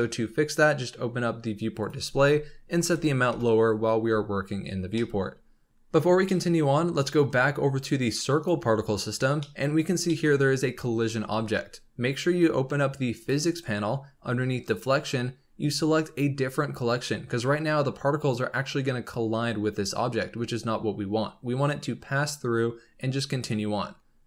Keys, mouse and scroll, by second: 0.6-4.8 drag, 4.8 scroll down 2, 4.9-5.7 middle drag, 6.3-7.4 middle drag, 7.3 scroll up 2, 8.3 click, 9.4-10.3 middle drag, 10.3 scroll up 2, 12.4-13.1 scroll up 3, 13.1-17.6 drag.